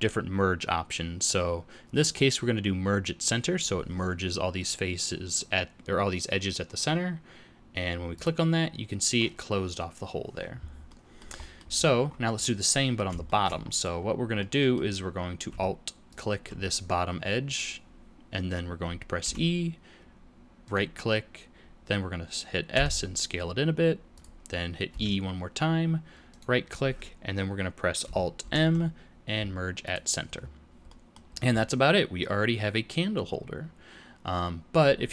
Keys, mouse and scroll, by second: 10.8 middle click, 11.3 middle click, 11.7-12.3 scroll down 1, 12.3 middle click, 12.3 scroll down 4, 13.2 shift+middle click, 13.6-14.8 scroll up 3, 14.3 middle click, 16.0 alt+click, 19.1 e, 22.7 s, 24.8 e, 28.3 alt+m, 30.3-31.5 scroll down 6, 30.8 middle click, 31.5 middle click.